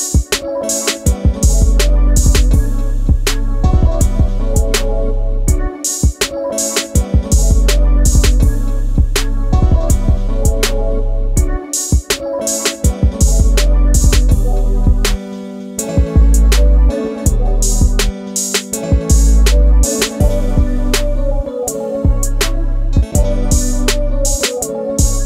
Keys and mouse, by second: 4.7-6.1 middle drag, 7.1 KP_1, 7.9 Tab, 8.7 click, 13.4 click, 15.2 s, 15.3 z, 17.5 click, 18.5-21.1 drag, 21.7 click, 22.6 click, 23.3 click, 24.4-25.2 drag.